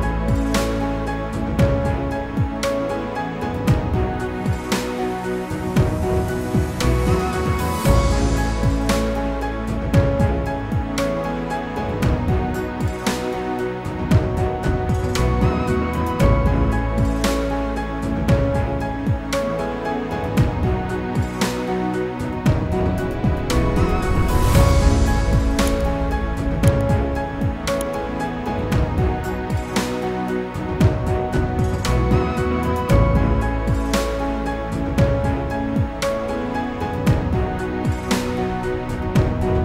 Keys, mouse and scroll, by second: 6.8 click, 7.6 click, 12.8 click, 13.9 F4, 15.5 F9, 18.2 click, 19.4 ctrl+click, 20.4 click, 22.2 click, 23.6 click, 24.7 click, 25.7 ctrl+click, 26.7 ctrl+r, 28.4 ctrl+click, 29.4 ctrl+r, 30.3 click, 31.4 click, 32.9 click, 34.2 ctrl+click, 35.1 ctrl+r, 35.8 click, 37.6 click.